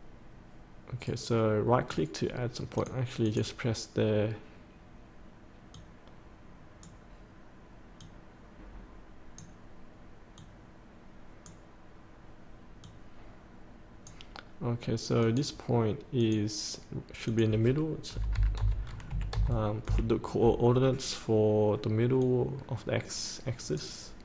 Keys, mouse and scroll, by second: 1.0-2.2 right drag, 2.7-4.3 drag, 18.1 KP_8, 19.1 KP_Decimal, 19.3 KP_5, 22.2-24.2 drag.